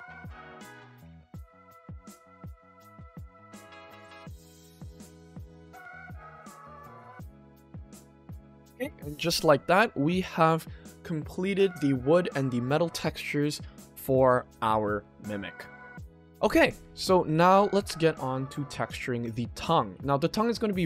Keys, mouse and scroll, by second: 1.9 click, 2.4-3.3 drag, 3.9 click, 4.3 Tab, 4.8 click, 5.3-6.2 middle drag, 6.4 click, 6.6 ctrl+s, 6.9-7.6 middle drag, 7.8-8.4 scroll down 1, 17.0-17.8 shift+middle drag, 19.2 click, 19.8 ctrl+s.